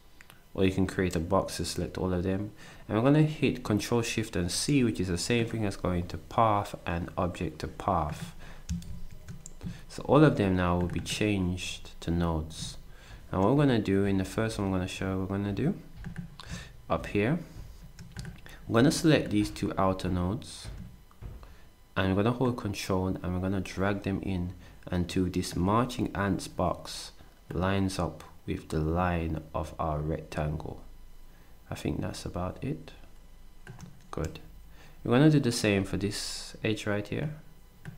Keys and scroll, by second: 8.9 ctrl+shift+c.